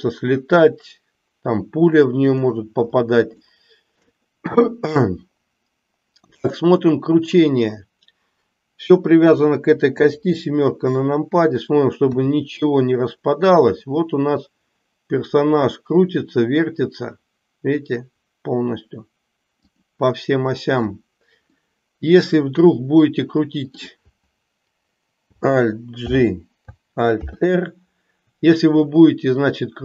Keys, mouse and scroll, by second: 3.4-4.2 shift+middle drag, 6.4 click, 12.1 r, 21.6-23.7 middle drag, 26.0 alt+g, 27.1 alt+r.